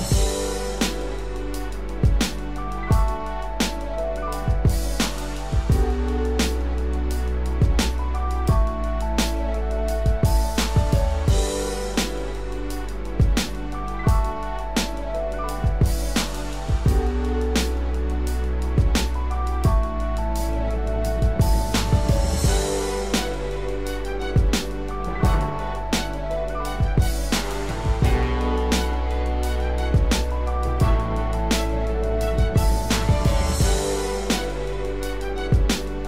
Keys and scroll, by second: 26.4 ctrl+=, 29.5 ctrl+-.